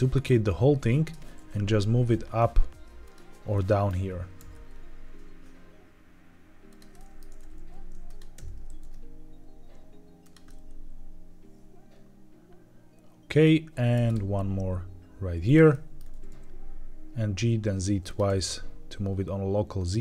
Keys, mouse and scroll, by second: 0.9 ctrl+click, 1.2 g, 1.2 z, 2.9 click, 3.4 middle click, 4.4 alt+d, 6.6 ctrl+click, 6.8 middle click, 7.2-8.6 typing, 8.0 click, 10.1 click, 10.4-13.4 middle drag, 14.0 alt+d, 15.3 ctrl+click, 15.6 middle drag, 16.0 g, 16.0 z, 16.2 z, 18.0 click, 18.2 g, 19.8 click.